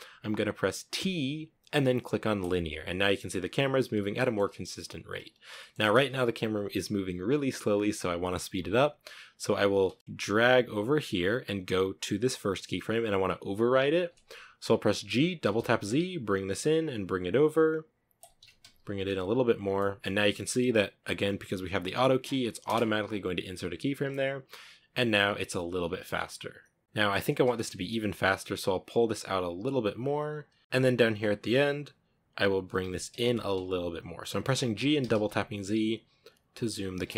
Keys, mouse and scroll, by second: 0.2 t, 2.9-4.7 scroll up 4, 3.5 middle click, 4.8-7.9 shift+middle drag, 8.9 space, 10.0-14.3 drag, 14.3 g, 15.7 g, 17.8 g, 18.5 g, 21.8 space, 22.0-22.4 scroll down 10, 23.0-23.6 scroll up 4, 23.8 scroll down 2, 24.4 scroll down 1, 24.6-25.0 shift+middle drag, 25.0 scroll up 1, 26.2 scroll down 2, 26.6 space, 26.8 g, 29.0 g, 30.0 g, 30.5 g, 30.6-32.0 drag, 32.0 g, 33.9 g, 35.2 middle click, 35.6 g.